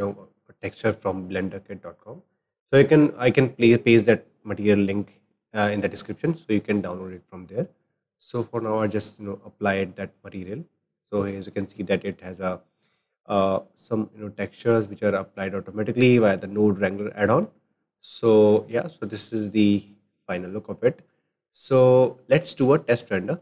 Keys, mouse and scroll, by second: 0.4-5.7 shift+middle drag, 8.6-10.6 drag, 10.8-11.6 scroll up 8, 12.0-18.5 shift+middle drag, 18.5-21.9 drag, 23.3 click.